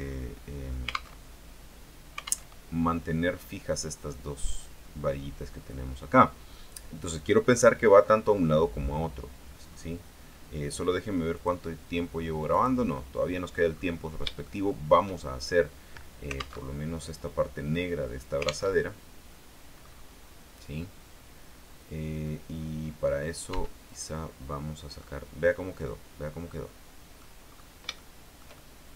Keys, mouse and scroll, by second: 1.3 alt+Tab, 2.6 alt+Tab, 5.3 scroll down 1, 5.8-6.2 scroll up 1, 6.2-7.4 scroll down 1, 7.4-7.7 scroll down 1, 9.0-9.4 scroll down 1, 9.5 scroll down 1, 9.8-10.1 scroll up 1, 10.5 scroll down 1, 11.5 click, 12.7 click, 13.4-14.2 scroll down 2, 14.2-14.6 scroll up 3, 14.6 shift+middle click, 15.4-15.7 shift+scroll down 2, 16.8 alt+Tab, 18.8 alt+Tab, 19.9-20.3 scroll up 2, 20.4 scroll up 2, 21.1-22.4 scroll down 2, 22.7-23.0 scroll up 2, 23.6 Tab, 24.0 right click, 24.6-24.9 scroll down 1, 25.2-27.5 middle drag, 27.6-28.0 scroll up 1, 28.1-28.9 shift+middle drag.